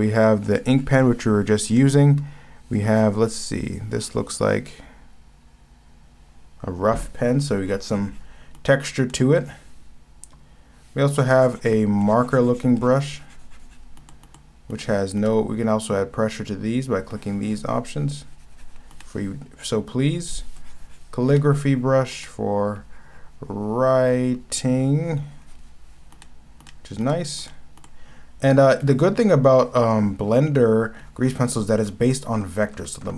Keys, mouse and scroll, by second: 1.8 ctrl+z, 8.6 ctrl+z, 9.0 ctrl+z, 14.0 ctrl+z, 14.2 ctrl+z, 14.7 ctrl+z, 15.2 ctrl+z, 19.0 ctrl+z, 22.1 ctrl+z, 26.2 ctrl+z, 26.6 ctrl+z, 27.0 ctrl+z, 27.4 ctrl+z, 27.8 ctrl+z, 32.3 ctrl+z, 32.3 scroll up 1, 32.5 ctrl+z, 32.6 scroll down 1, 33.0 ctrl+z, 33.0 scroll up 2.